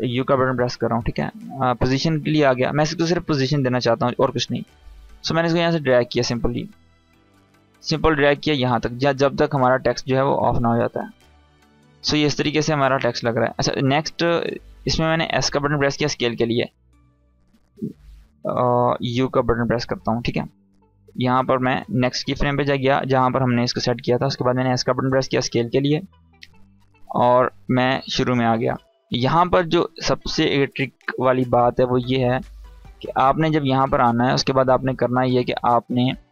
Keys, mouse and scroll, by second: 4.9-6.2 drag, 14.8 s, 16.2-17.8 drag, 18.5 u, 21.5 click, 24.2 s, 25.0-27.9 drag.